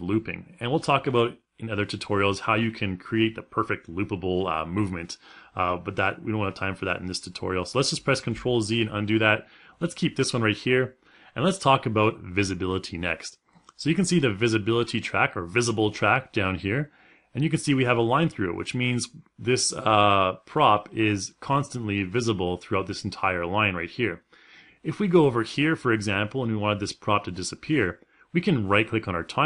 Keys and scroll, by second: 7.9 ctrl+z.